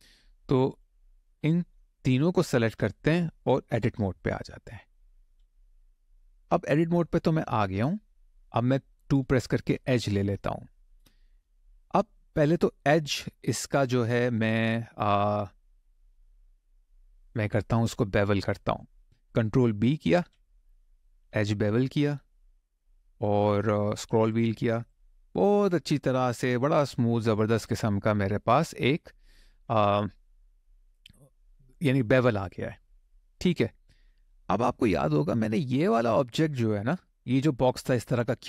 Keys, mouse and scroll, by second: 0.4 click, 1.7 shift+click, 2.1 shift+click, 5.0 Tab, 5.8 click, 6.3 middle click, 7.1-7.5 scroll up 1, 7.5 middle click, 9.0 2, 9.7-10.1 scroll up 1, 10.3 shift+middle click, 16.0 click, 16.9 middle click, 19.9 ctrl+b, 22.1-23.9 scroll up 8, 23.9 scroll down 1, 24.1 scroll up 1, 24.6 click, 25.2 middle click, 30.0 middle click, 32.2 middle click, 33.5 shift+middle click.